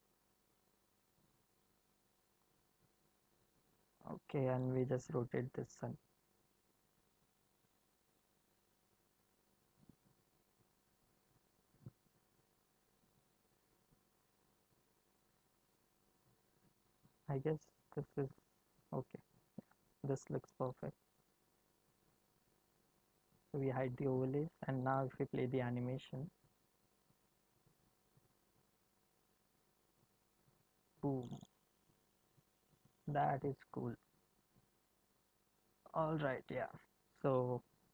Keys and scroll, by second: 4.6 r, 17.3 r, 25.0 space.